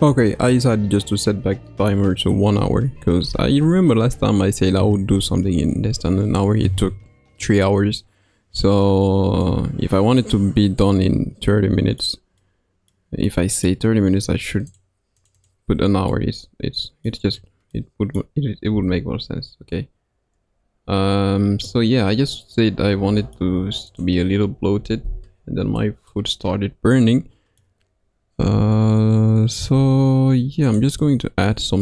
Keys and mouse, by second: 13.2-14.7 middle drag, 14.7 click, 15.1 click, 15.4 click, 16.1 middle click, 17.7 middle click, 18.7 s, 21.6-25.2 middle drag, 25.8 middle click, 26.9 middle click, 28.5 g.